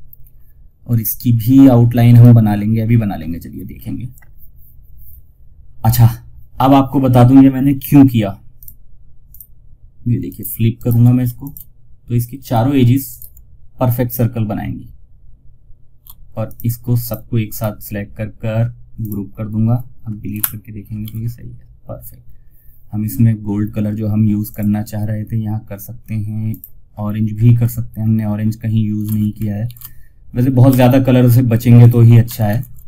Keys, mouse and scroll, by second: 1.4 right click, 3.0-3.6 scroll down 1, 3.6-4.2 scroll down 1, 7.9 click, 10.0 ctrl+right click, 10.7 shift+click, 12.4 ctrl+right click, 15.7 shift+click, 16.8 right click, 18.2 click, 20.3 ctrl+z, 23.8 click, 27.3 scroll down 1, 28.3-28.9 ctrl+scroll down 1, 30.0 ctrl+alt+s, 31.1 click, 31.8 ctrl+alt+shift+s, 32.7 click.